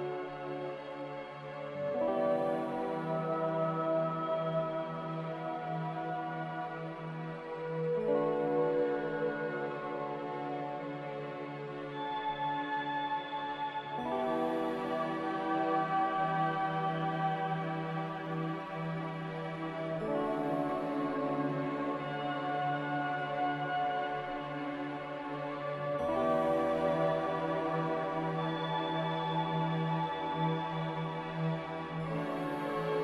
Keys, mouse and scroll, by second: 4.1 click, 5.5 Delete, 6.1 click, 8.3 click, 8.7 b, 14.0-14.8 typing, 24.6 b, 29.2-30.1 typing.